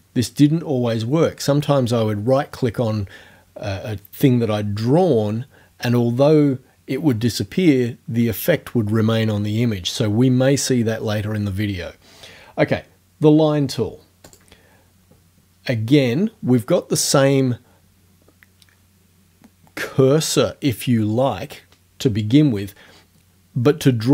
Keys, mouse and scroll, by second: 14.3 click.